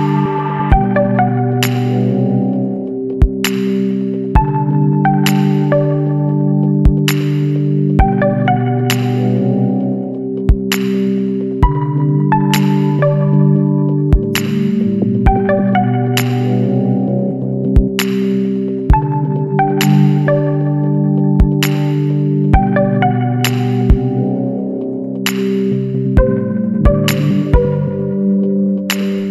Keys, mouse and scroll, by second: 0.6 ctrl+click, 3.8 click, 6.6-8.0 middle drag, 6.8-8.0 drag, 8.2 scroll down 1, 8.8 scroll down 1, 9.3-9.7 scroll up 1, 10.3-11.7 middle drag, 10.5-11.7 drag, 11.9-12.8 scroll down 2, 13.4-14.8 middle drag, 13.5 click, 14.8-15.9 scroll up 6, 16.2-20.2 middle drag, 16.4-21.7 drag, 20.2-21.7 right drag, 21.8-22.2 scroll down 2, 22.8 scroll up 1, 23.6 scroll up 1, 24.0 KP_1, 25.8 KP_2, 26.4 scroll down 2, 27.4 scroll down 2, 27.9-29.0 scroll up 3.